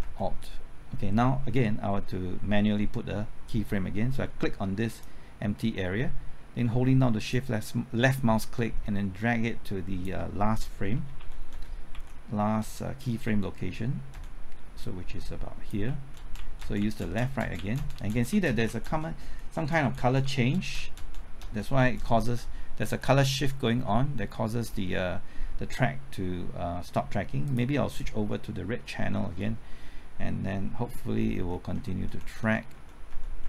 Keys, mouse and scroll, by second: 0.0 alt+Right, 4.9 click, 7.3-10.0 shift+drag, 11.2 Left, 11.5-12.6 typing, 14.1 typing, 14.8 click, 15.8-16.8 typing, 17.0 Right, 17.2 Left, 17.4 Right, 17.5 Left, 17.7 Right, 17.9 Left, 18.1 Right, 18.3 Left, 18.4 Right, 18.8 Left, 19.1 typing, 19.5 Right, 19.7 Left, 19.9 Right, 20.2 Left, 20.5 Right, 20.7 Left, 20.9 Right, 21.1 Left, 21.4 Right, 21.7 Left, 22.0 Right, 22.6 Left, 22.8 Right, 23.1 Left, 23.3 Right, 27.4 click, 31.3 alt+Right, 31.7-32.7 typing, 32.1 alt+Right.